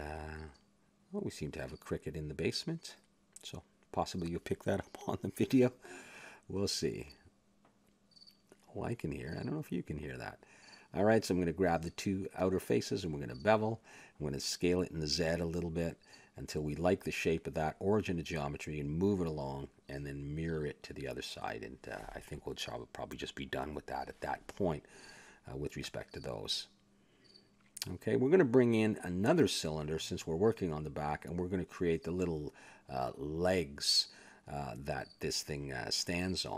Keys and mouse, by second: 0.9 click, 2.5-4.1 drag, 4.1 middle click, 6.0 s, 7.6 a, 8.7 a, 9.6 s, 10.8 a, 11.2 right click, 11.4 click, 12.9 ctrl+b, 14.8 a, 15.0 a, 15.7 s, 16.7 a, 16.9 Tab, 18.2-19.9 drag, 20.4 click, 22.0 click, 22.7-24.8 middle drag, 24.8 click, 25.3 a, 27.0 shift+a, 28.6 click, 29.8 r, 30.9 Tab, 31.9 s, 33.0 click, 34.1 click, 35.0 KP_Decimal, 35.2 middle click, 35.8 click, 36.2 middle click.